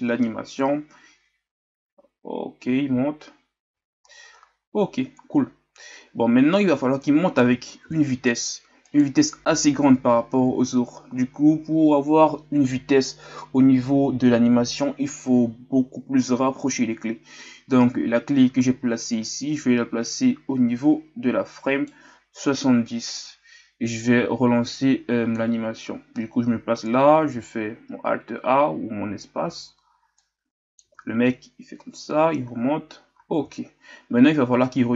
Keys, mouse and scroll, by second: 0.0-1.4 scroll down 3, 3.8 alt+a, 6.5-7.8 right drag, 7.8 ctrl+z, 8.8-23.0 right drag, 23.0-29.5 drag, 29.5 alt+a, 30.2-34.9 drag.